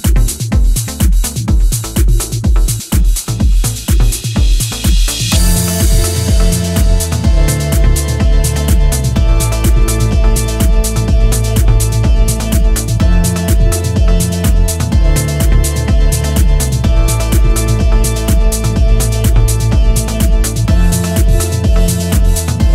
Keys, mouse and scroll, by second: 3.1 click, 5.5 scroll down 1, 5.8 middle click, 7.0 click, 10.2-10.7 scroll down 1, 10.7 middle click, 12.4 click, 14.7 click, 16.7-17.1 scroll down 2, 17.1 middle click, 17.7 scroll up 3, 18.7 click, 22.0 click.